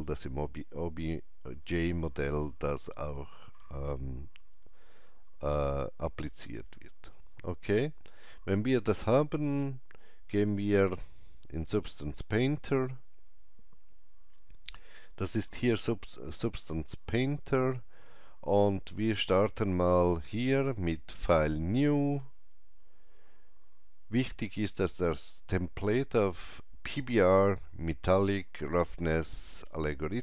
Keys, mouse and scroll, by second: 10.4 click, 10.4 scroll down 1, 12.1 click, 19.9 click.